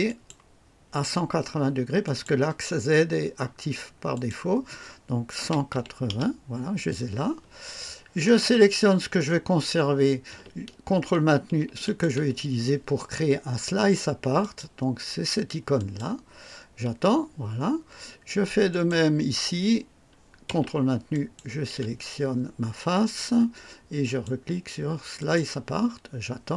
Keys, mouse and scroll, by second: 0.0 click, 2.0 click, 4.1 click, 5.3 KP_1, 5.7 KP_8, 6.1 KP_0, 8.2 click, 11.8 ctrl+click, 14.4 click, 15.7 click, 18.7 click, 21.1 ctrl+click, 24.0 click, 25.2 click.